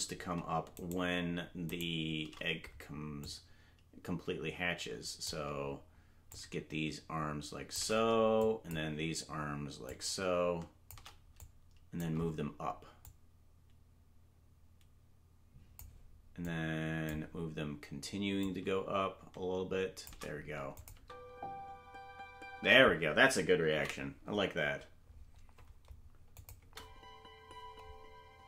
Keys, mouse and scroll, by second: 3.2-5.3 drag, 6.3-7.8 shift+drag, 8.4 click, 9.9-10.9 drag, 11.4 click, 13.0-15.8 drag, 16.5 click, 18.4-20.1 drag, 20.8 click, 21.0 space, 22.6 space, 25.6 ctrl+s, 26.4 click, 26.6 space.